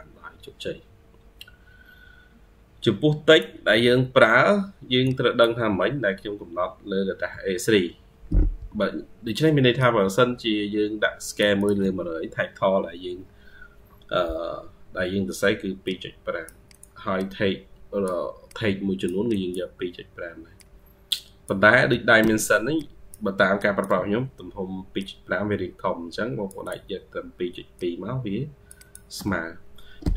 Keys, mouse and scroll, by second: 4.1-4.9 scroll down 12, 9.2-11.5 ctrl+q, 12.6 ctrl+q, 17.0 double click, 19.7 ctrl+q, 22.1 Escape, 24.1-28.9 ctrl+q, 24.8 ctrl+click, 25.0 ctrl+q, 28.6 ctrl+click, 28.7 ctrl+q, 30.0 ctrl+q.